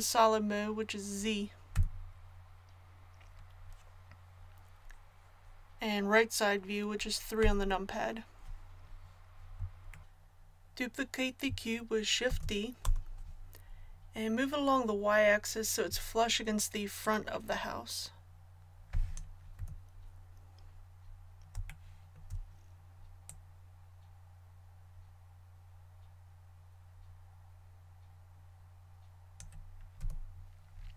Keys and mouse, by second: 1.7 z, 7.4 KP_3, 12.2 shift+d, 17.0-19.1 drag, 19.5 z, 23.2-25.1 drag, 29.9 z.